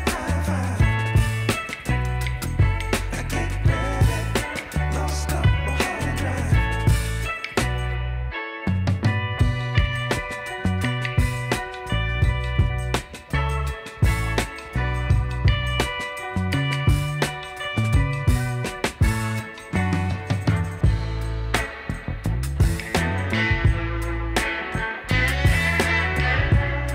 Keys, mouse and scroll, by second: 26.8 double click.